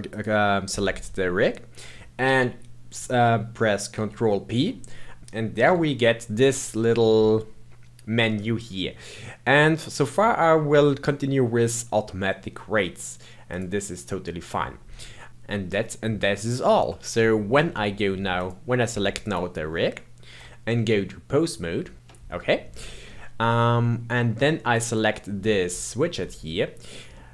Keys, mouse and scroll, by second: 0.1 shift+click, 3.9 ctrl+p, 5.6 ctrl+p, 15.3-18.1 middle drag, 18.3 click, 19.2 click, 20.9 Tab, 21.8 Tab, 23.0-24.8 middle drag, 24.8 click, 25.6-27.3 middle drag.